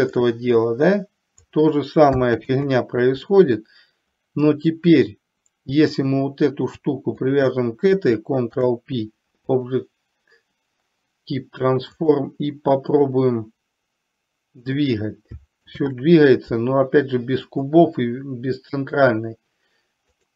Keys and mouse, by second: 0.4-1.5 drag, 2.5 ctrl+z, 6.0 click, 7.3 shift+click, 8.5 ctrl+p, 12.0 click, 13.4-14.9 drag, 15.8 ctrl+z, 17.5 click.